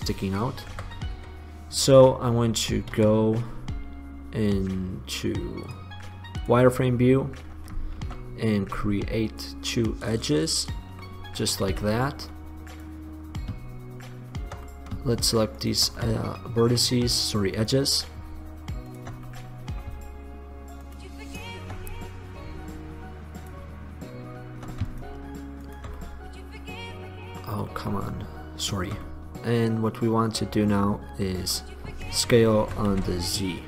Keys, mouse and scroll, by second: 0.8 KP_1, 1.3 KP_3, 3.1 KP_5, 8.1 ctrl+r, 10.1-11.7 drag, 11.9 z, 17.7-19.1 drag, 22.8 middle click, 23.7-25.1 drag, 26.1-27.8 drag, 27.8-30.9 middle drag, 32.8 s.